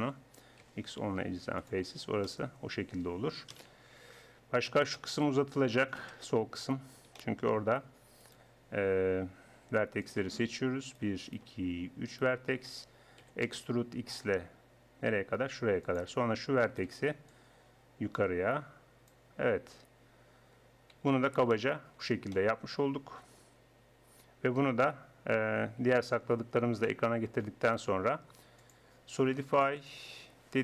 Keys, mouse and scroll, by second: 0.5 click, 0.6 x, 3.5 KP_1, 6.0 KP_1, 8.2-9.2 right drag, 9.2 click, 10.1 click, 10.9-12.0 middle drag, 12.0-13.2 right drag, 13.2 e, 13.6 right click, 16.7 click, 16.8-18.4 right drag, 17.3-19.4 drag, 19.4 middle click, 20.2 click, 20.5 middle click, 21.0 Tab, 21.3 middle click, 26.2 alt+h, 29.9 click, 30.5-30.6 middle drag.